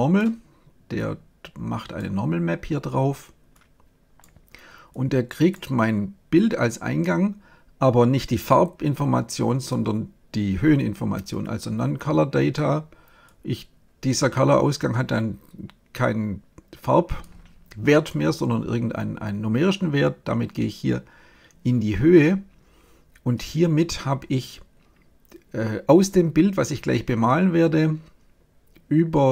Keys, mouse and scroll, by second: 0.9-6.8 drag, 8.2-10.2 drag, 13.2-15.0 drag.